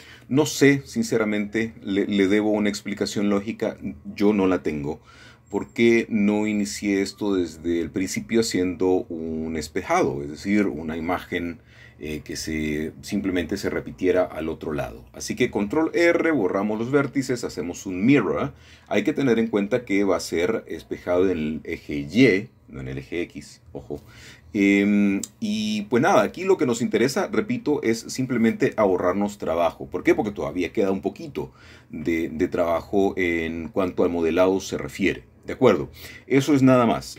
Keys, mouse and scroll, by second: 1.0 ctrl+r, 2.0 click, 2.2 Escape, 2.5 Escape, 2.7 Escape, 3.8 Escape, 4.7 Escape, 6.1 b, 7.1-9.4 drag, 10.7 x, 11.4 click, 13.5 click, 14.7 click, 16.4-17.6 drag, 18.2-19.3 drag, 19.3-20.4 drag, 21.4-22.5 drag, 23.5 KP_3, 24.9-25.7 scroll up 2, 25.7 shift+middle click, 28.5 typing, 29.5-30.2 typing.